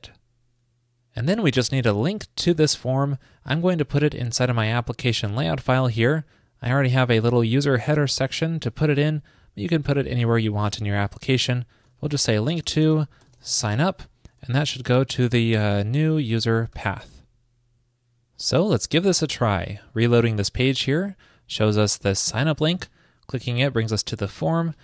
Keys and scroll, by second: 10.4 ctrl+shift+>, 17.3 super+s.